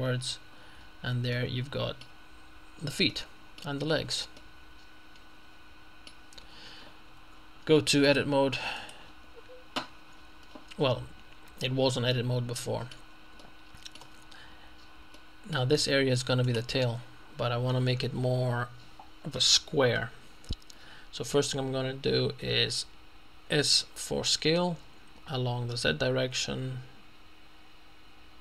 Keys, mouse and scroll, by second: 0.4 middle click, 1.4-2.6 middle drag, 2.6-3.2 scroll down 2, 3.2 middle click, 4.0 Tab, 4.4-6.6 middle drag, 6.4 Tab, 7.2 Tab, 8.1 click, 8.8 click, 11.3-12.0 scroll up 2, 12.0 middle click, 14.6-15.2 scroll up 1, 15.2 shift+middle click, 16.6 right click, 17.0-17.9 scroll up 2, 23.5 s, 25.8 z.